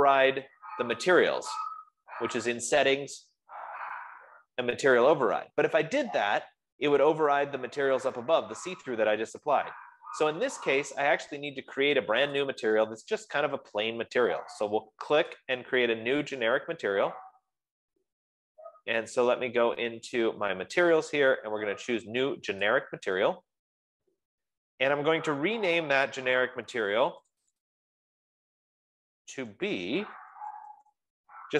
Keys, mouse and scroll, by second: 3.5 F15, 12.8-20.8 drag, 23.0 click, 27.8 click, 28.0 click, 29.9-31.1 typing.